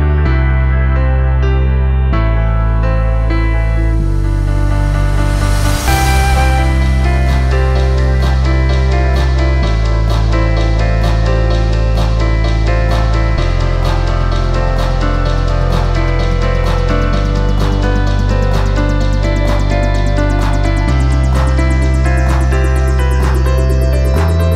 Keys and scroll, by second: 1.2 p, 2.5 4, 3.8 ctrl+z, 5.6 3, 6.8 p, 8.0 p, 16.5 p, 18.4 p, 20.7 ctrl+z, 22.4 p.